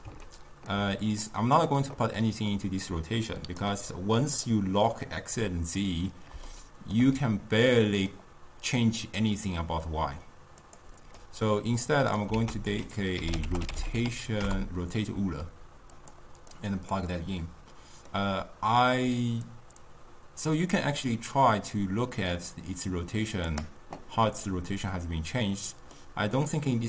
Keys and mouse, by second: 1.3 click, 2.5-4.0 drag, 4.0-9.1 middle drag, 9.1 click, 10.7 click, 11.2 middle click, 11.9 click, 12.4 ctrl+a, 16.6 click, 17.3-19.6 middle drag, 19.6-22.6 drag, 24.2-26.8 middle drag.